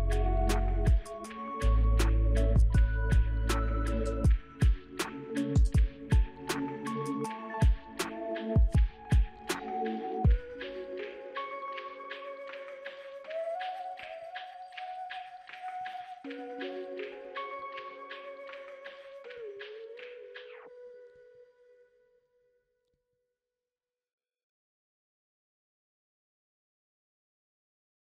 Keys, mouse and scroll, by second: 0.2 ctrl+right click, 0.9 ctrl+right click, 4.0 right click, 15.4-16.1 scroll down 4, 16.1 ctrl+alt+click, 16.8 ctrl+alt+click, 17.2-17.9 scroll up 6, 17.9 double click, 18.1 right click.